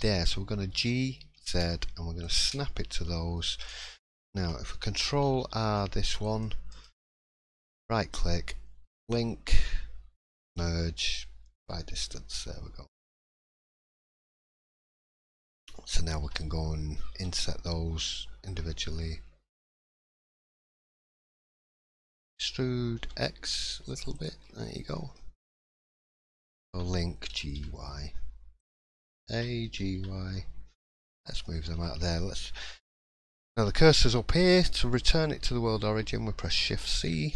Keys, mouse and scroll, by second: 0.7 g, 3.0-3.7 scroll down 4, 3.3 middle click, 3.9 shift+middle click, 5.3 ctrl+r, 7.8 middle click, 8.2 scroll down 1, 8.9-9.5 scroll down 2, 8.9 l, 9.5 l, 10.5 m, 14.1 click, 14.1 3, 14.5 shift+middle click, 15.0-15.4 scroll up 2, 15.4-16.2 scroll down 1, 16.2 l, 17.1 l, 21.3 middle click, 22.2 e, 24.4-24.9 scroll down 1, 24.9 middle click, 24.9-25.2 scroll down 4, 25.4 click, 25.7 shift+middle click, 26.7 l, 27.3 g, 31.4 shift+middle click, 32.6 middle click.